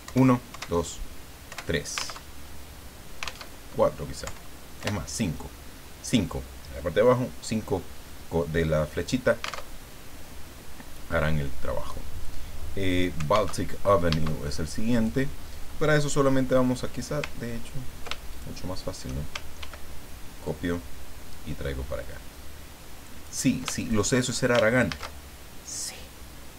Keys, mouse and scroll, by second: 0.0 Up, 1.5 Up, 2.3 alt+Tab, 3.5 alt+Tab, 4.2 Up, 8.6-9.6 drag, 9.7 alt+Tab, 13.6 alt+Tab, 14.9 click, 18.3 ctrl+shift+click, 20.4-23.5 ctrl+drag, 23.8 ctrl+shift+click, 24.9 ctrl+shift+a.